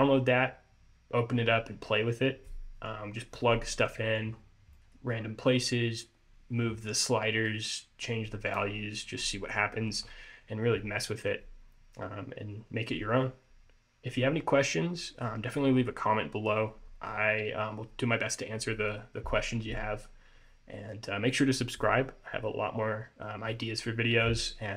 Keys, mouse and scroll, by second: 4.4-4.9 scroll up 2, 4.9 middle click, 5.3-7.5 scroll up 3.